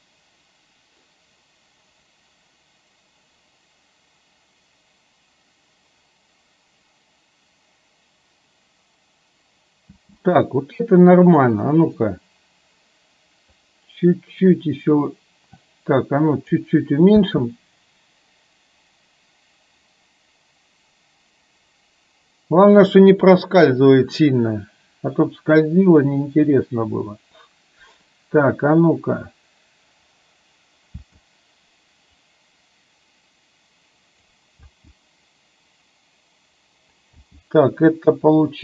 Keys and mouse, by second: 10.0 space, 13.8-16.7 drag, 17.2 space, 31.1 space, 32.4-34.2 drag, 34.6 space, 37.3 space.